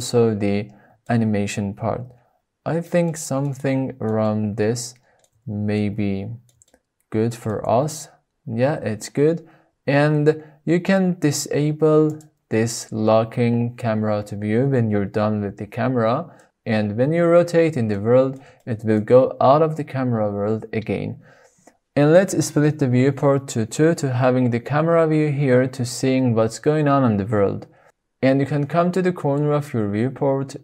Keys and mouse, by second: 1.2 shift+click, 1.9 shift+drag, 2.1 shift+middle click, 2.6 shift+drag, 2.9 click, 3.7 shift+middle click, 5.2-6.8 ctrl+middle drag, 6.9 shift+middle click, 7.5 middle click, 8.2 shift+middle click, 9.9 middle click, 10.6 shift+middle click, 11.0 shift+click, 15.9 click, 18.8 n, 20.4-21.1 middle drag, 21.7 middle click, 24.1 middle click, 24.7-25.0 shift+middle drag.